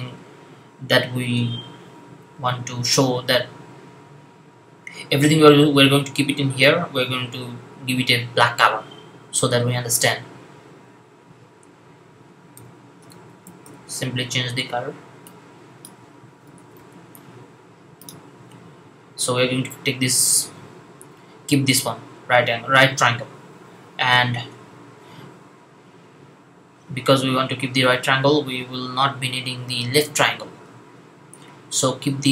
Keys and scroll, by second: 12.4-13.5 typing, 16.1-16.8 typing.